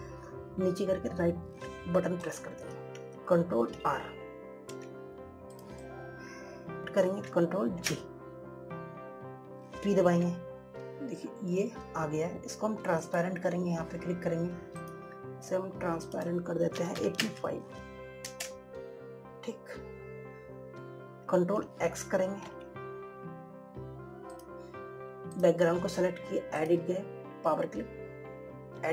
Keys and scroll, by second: 5.1 ctrl+r, 9.1 ctrl+g, 23.9 ctrl+x.